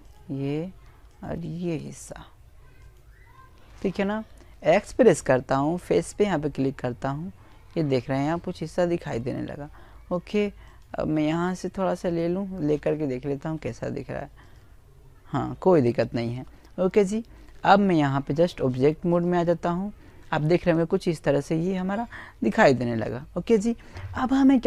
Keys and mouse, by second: 2.5 x, 5.1 middle click, 8.4-11.1 right drag, 11.1 x, 14.0-15.4 middle drag, 16.1 click, 18.0-22.6 middle drag, 23.3 click.